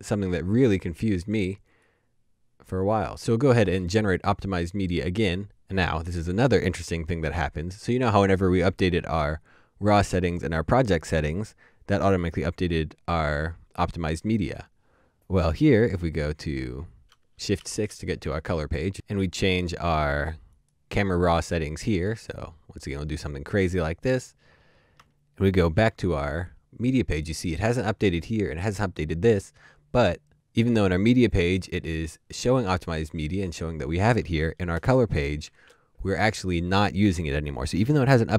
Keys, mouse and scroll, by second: 3.3 ctrl+shift+3, 18.1 Up, 24.9 Up, 25.6 shift+2, 35.2 shift+2.